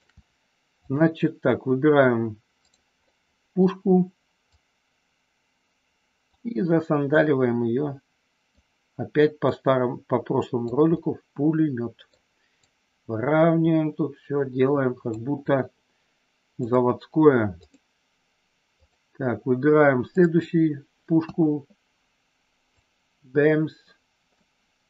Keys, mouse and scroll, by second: 0.8 click, 2.5 click, 3.1 middle click, 4.5-6.3 drag, 7.1-8.6 drag, 9.5-10.6 drag, 11.0 scroll up 1, 11.1-12.1 middle drag, 12.6-15.1 drag, 16.5 click, 17.6 click, 18.7 click, 20.0 click, 21.2 KP_1, 22.7-24.3 drag.